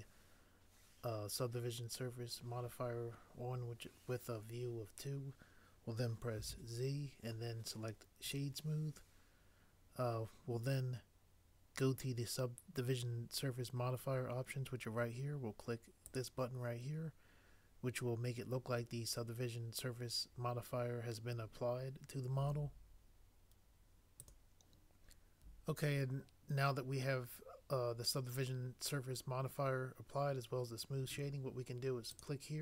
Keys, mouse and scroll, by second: 6.4 z.